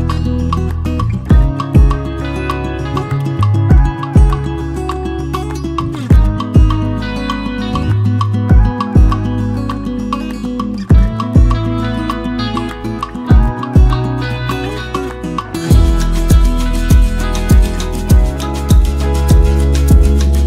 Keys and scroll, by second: 0.3 shift+Down, 0.5 shift+Down, 0.6 shift+Down, 1.0 shift+Down, 1.2 shift+Down, 1.4 shift+Down, 1.6 shift+Down, 1.8 shift+Down, 2.2 shift+Down, 3.2 shift+Down, 3.6 shift+Down, 4.6 Up, 4.8 Up, 5.0 Up, 5.1 Up, 5.3 Up, 5.5 Up, 5.6 Up, 6.2 Up, 6.7 Down, 6.8 Down, 12.5-13.3 typing, 14.4 Down, 14.5-15.8 typing, 14.5 Down, 14.6 Down, 14.6 Up.